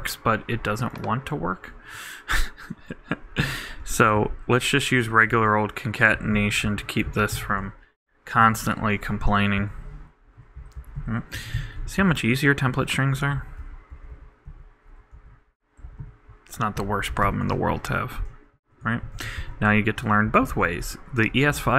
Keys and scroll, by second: 5.0 shift+Right, 5.3 shift+=, 6.1 shift+Delete, 6.6 alt+Right, 7.6 shift+BackSpace, 8.4 shift+=, 9.1 shift+Right, 10.4 alt+', 10.6 alt+Right, 11.8 shift+BackSpace, 12.0 shift+', 12.7 shift+=, 13.3 alt+shift+=, 13.4 alt+shift+Right, 17.5 shift+BackSpace, 19.0 shift+=, 19.4 shift+', 20.3 shift+super+BackSpace, 20.5 super+Right.